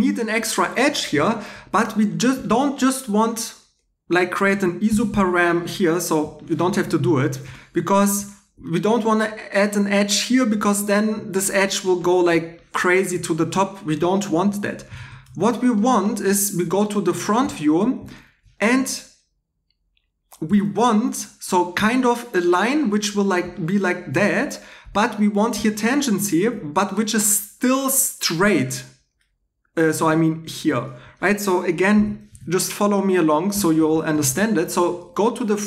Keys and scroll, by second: 4.9 super+r, 7.4 2, 14.3 super+z, 14.9 super+z, 20.5 shift+a, 31.9 x.